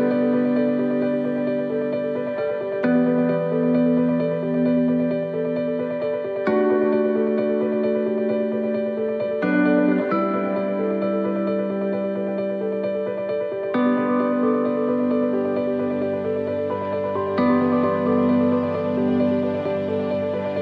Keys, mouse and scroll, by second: 0.2 shift+middle click, 0.7-1.2 scroll up 3, 3.2 scroll up 1, 3.3 scroll down 4, 3.7 shift+middle click, 4.6-5.0 scroll down 1, 5.0 middle click, 6.4 shift+middle click, 9.1 click, 9.8 right click, 10.8 c, 20.5 shift+middle click.